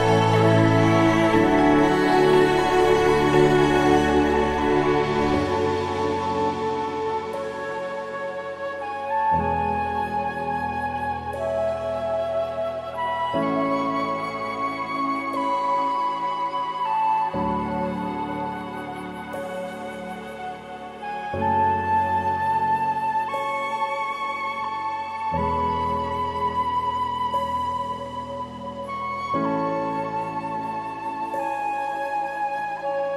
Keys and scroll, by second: 4.8 ctrl+i, 8.3 ctrl+=, 8.6 ctrl+=, 9.5 typing, 10.9 typing.